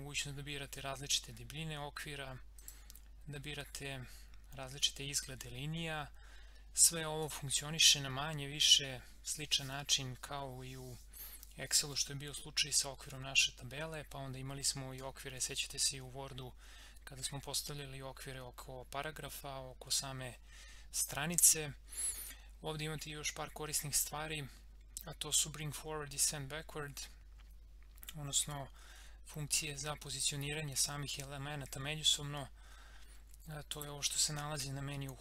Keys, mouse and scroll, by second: 2.6 click, 7.2 click, 33.7 click.